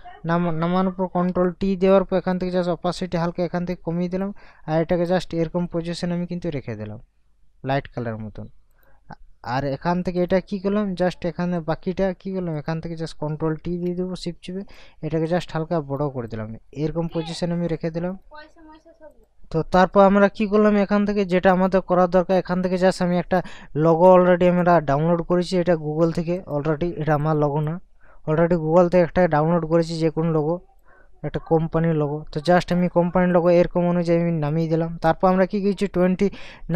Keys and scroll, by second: 1.0 ctrl+t, 13.6 ctrl+t.